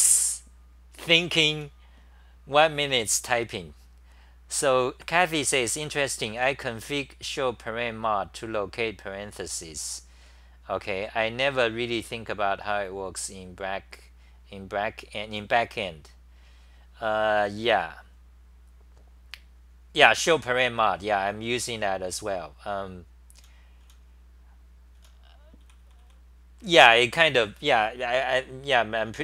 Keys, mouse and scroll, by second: 1.6 t, 2.8 t, 23.8 t, 25.0 t.